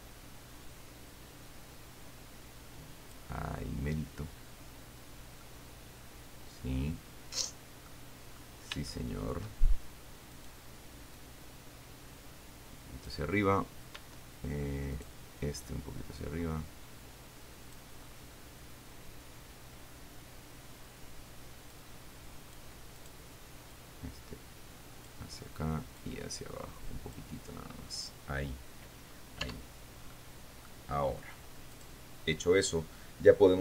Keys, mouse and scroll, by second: 3.7-5.2 scroll down 1, 5.7-8.3 middle drag, 9.1 shift+middle click, 10.6 right click, 11.4-13.5 drag, 15.2 right click, 15.9-18.2 drag, 18.2-18.7 scroll down 1, 22.0 middle click, 22.4 click, 23.2 right click, 24.0-25.5 drag, 26.3-27.6 drag, 28.8-29.5 scroll up 1, 29.5-30.1 scroll down 2, 29.9 Tab, 30.4 middle click, 32.2 right click.